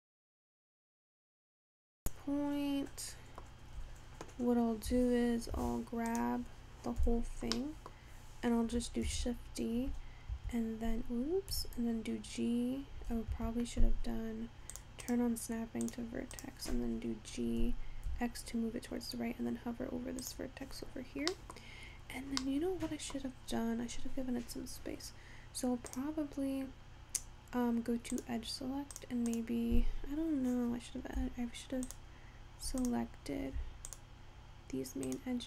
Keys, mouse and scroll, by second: 0.7-1.6 scroll down 2, 1.6-3.8 middle drag, 3.8-4.7 scroll up 1, 4.7-5.0 scroll down 2, 5.0 Tab, 5.7 Tab, 6.2 click, 7.1 a, 7.6 scroll down 1, 7.6 middle click, 8.1-9.1 scroll up 3, 9.1 shift+d, 11.6 g, 14.8 click, 15.1-16.6 drag, 17.5 g, 20.7-21.4 scroll down 2, 21.4 middle click, 21.7-22.5 scroll up 3, 22.5-23.5 middle drag, 23.5-25.8 scroll down 1, 25.9 click, 26.8-27.4 scroll up 1, 27.4-28.3 scroll down 1, 28.3 click, 29.0 click, 29.4 click, 30.0 scroll up 1, 31.9 shift+click, 32.8 click, 34.0 shift+click, 35.1 shift+click.